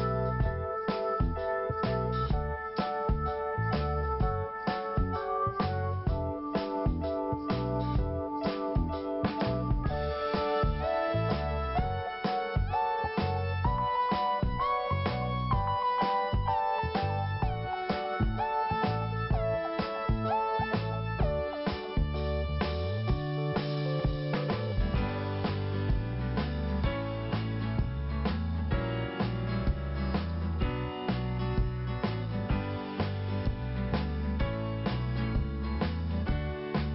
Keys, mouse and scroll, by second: 0.7 p, 1.8 click, 3.5 scroll up 1, 4.3 scroll up 1, 10.3 click, 10.5 click, 11.3 click, 11.4 click, 12.2 click, 12.3 click, 13.4 click, 13.5 click, 14.0 click, 14.8 click, 15.2 click, 15.3 click, 15.9 click, 16.0 click, 16.7 click, 18.3 scroll down 1, 19.3 click, 20.7 scroll up 1, 22.0 click, 25.2 click, 26.0 scroll down 1, 27.2 click, 29.3 scroll down 1, 30.3 scroll up 2, 31.4 click, 34.6 scroll down 1, 35.3 scroll up 1, 36.5 click.